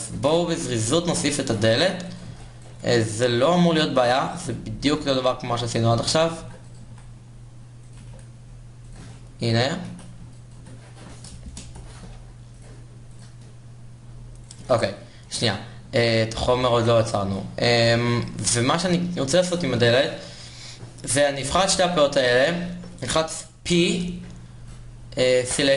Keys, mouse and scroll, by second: 1.0 shift+z, 2.0 KP_1, 2.5 Tab, 3.4 a, 6.8 e, 8.0 e, 8.4 s, 9.3-10.4 drag, 9.6 e, 10.6 Tab, 11.2 Tab, 11.5 a, 13.0 ctrl+KP_Add, 16.4 Tab, 16.9 Tab, 17.4 a, 18.6-23.0 middle drag, 25.1 p.